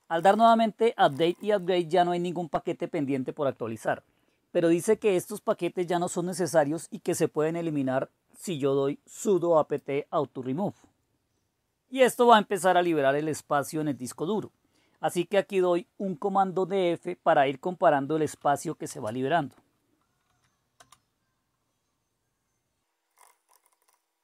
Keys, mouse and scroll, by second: 0.0-1.6 typing, 4.3-4.8 scroll up 1, 4.8-6.8 scroll up 1, 9.8-14.7 drag, 16.7 scroll down 2, 18.2-18.9 typing, 20.2-20.7 typing, 22.9-24.2 typing.